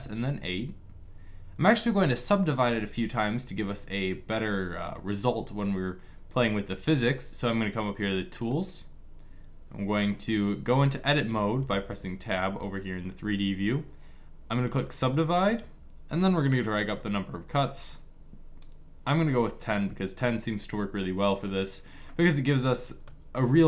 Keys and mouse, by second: 8.2-11.3 drag, 11.3 Tab, 14.7-18.3 drag, 19.9 middle click.